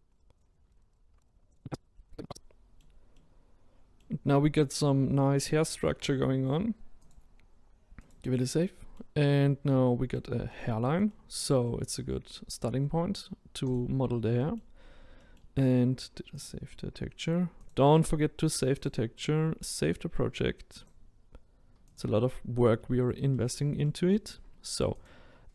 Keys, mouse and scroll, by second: 0.0 right drag, 0.0 middle click, 0.3 click, 0.6 middle click, 0.7 shift+right click, 0.9 click, 1.0 middle click, 1.1 ctrl+right drag, 1.2 click, 1.3 middle click, 1.4 ctrl+right click, 1.8 click, 1.9 middle drag, 2.0 ctrl+right drag, 2.2 click, 2.3-8.1 middle drag, 8.1-8.6 drag, 8.6-9.3 middle drag, 9.3-9.7 scroll down 1, 9.7-13.7 middle drag, 13.7 click, 14.4-14.8 middle drag, 14.8-15.2 scroll down 1, 15.2-16.3 middle drag, 16.3-22.0 drag, 22.8 scroll up 2, 23.3-25.0 middle drag, 25.0 click.